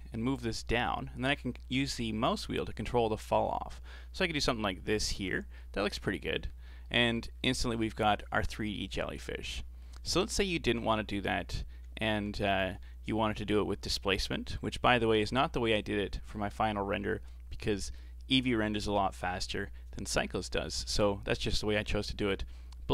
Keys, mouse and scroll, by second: 5.3 Tab, 5.6-6.4 middle drag, 6.4 a, 6.6 a, 6.8-7.3 middle drag, 7.3-7.7 scroll up 3, 7.7-9.2 middle drag, 9.2-9.6 scroll down 4, 9.6 middle click, 10.3 ctrl+z, 10.8 ctrl+z, 11.3 ctrl+z, 11.8 ctrl+z, 12.5-14.5 middle drag, 14.5 Tab, 14.7-15.3 middle drag, 15.3-15.7 scroll up 1, 15.7-18.7 middle drag.